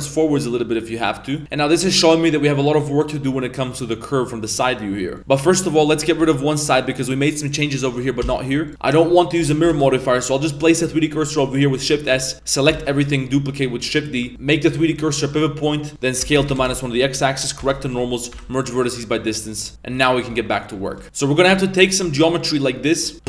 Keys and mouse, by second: 1.4 b, 1.4 a, 1.4 KP_3, 1.8 a, 5.2 middle drag, 5.7 middle click, 5.9 a, 6.2 b, 7.6 middle click, 8.2 x, 9.5 middle click, 9.7 shift+s, 10.3 middle click, 12.1 a, 12.7 shift+d, 14.3-15.3 drag, 14.3 s, 16.1 s, 17.6 shift+n, 17.9 a, 18.3 m, 19.2 middle click, 19.7 Tab, 19.9 KP_3, 20.3 Tab, 20.9 shift+middle click, 21.0 Tab, 21.0 a, 21.0 b, 21.9 shift+middle click, 22.6 b, 23.1 g.